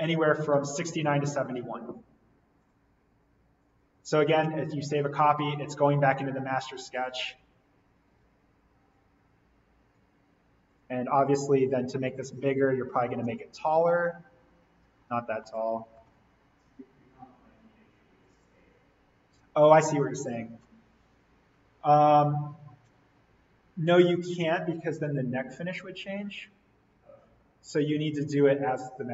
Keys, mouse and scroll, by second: 2.6 click, 6.0 right click, 6.9 click, 8.1 alt+n, 9.1-10.6 scroll down 1, 10.6 click, 13.8 click, 14.7-15.4 scroll up 1, 16.7 ctrl+z, 16.9-17.5 scroll down 1, 18.2 click.